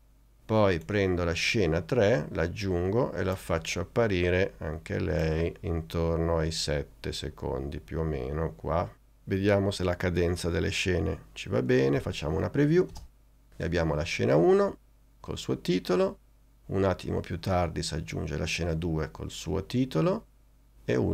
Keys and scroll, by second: 12.1 n, 13.0 space.